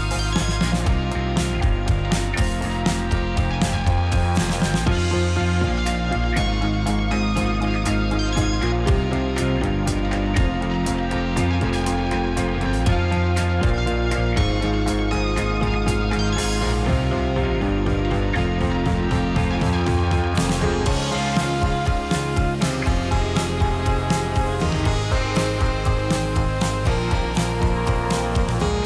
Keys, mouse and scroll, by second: 0.4 Tab, 0.5-0.9 right drag, 0.9 drag, 1.1-1.8 middle drag, 1.8 scroll down 2, 1.9 middle click, 2.3 click, 2.6-3.4 middle drag, 3.4-4.4 scroll down 3, 4.4 s, 5.9 g, 7.1 g, 9.2 shift+middle click, 10.0 g, 11.8 r, 13.7 g, 15.4-17.1 middle drag, 17.6 g, 19.6 alt+d, 21.5 s, 23.2 r, 24.6 s, 25.4-25.9 middle drag, 26.8-27.3 scroll up 1, 27.3-28.3 shift+middle drag.